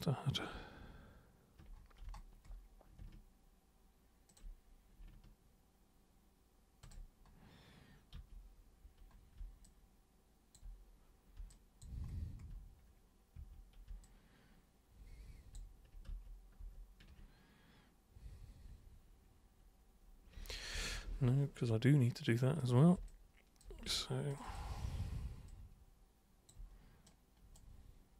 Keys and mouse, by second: 2.0 super+space, 4.3 ctrl+super+click, 6.8 ctrl+super+click, 8.2 super+3, 9.7 alt+super+click, 11.5 alt+super+click, 13.3 super+1, 14.0-15.5 alt+super+drag, 16.1 ctrl+super+z, 16.6 ctrl+super+z, 20.5 ctrl+super+z, 20.8 ctrl+super+z, 20.9 ctrl+super+z, 22.6 super+click, 23.0 alt+super+click, 24.3 ctrl+alt+shift+super+click, 24.4 shift+click, 25.5-26.5 alt+drag, 27.1 right click.